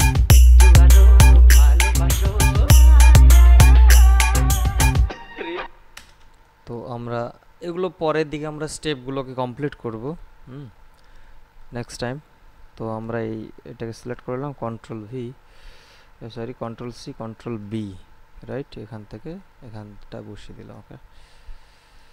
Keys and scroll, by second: 5.8 space, 14.8 ctrl+v, 16.5 ctrl+c, 17.4 ctrl+b.